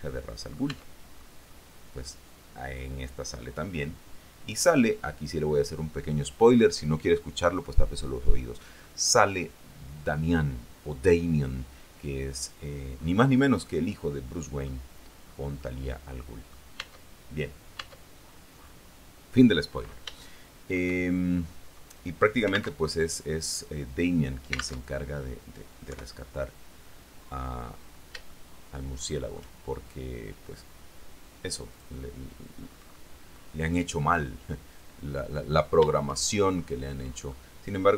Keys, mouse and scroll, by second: 0.9 Tab, 1.7-6.9 drag, 7.8-9.2 drag, 13.8-15.0 drag, 15.8-16.9 drag, 17.0 Tab, 18.0 Tab, 18.6 scroll down 2, 18.8-19.8 scroll up 2, 20.3 shift+middle click, 21.2 shift+middle click, 23.0 alt+Tab, 25.0 alt+Tab, 26.1 3, 28.5-30.0 shift+middle drag, 32.0 click, 32.8-34.7 scroll up 2, 34.7-35.1 scroll down 1, 36.6-37.6 shift+drag.